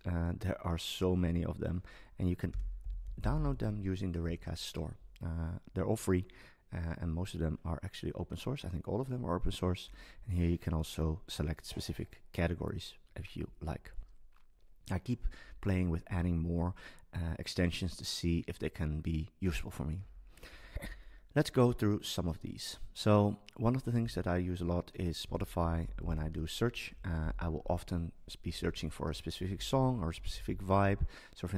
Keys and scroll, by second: 2.5 super+space, 25.2 super+space, 26.9 Down, 29.4 Up.